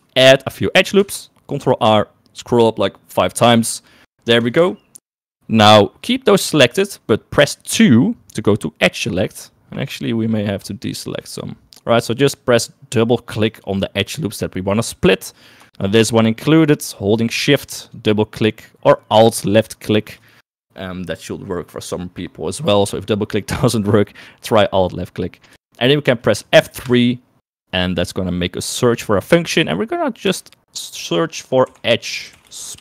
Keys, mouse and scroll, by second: 0.5 middle click, 1.2 ctrl+r, 7.8 2, 10.8 shift+middle click, 13.6 click, 16.1 shift+click, 16.5 shift+middle click, 17.9 shift+click, 19.3 shift+click, 19.5 shift+click, 25.8 shift+middle click, 27.0 F3.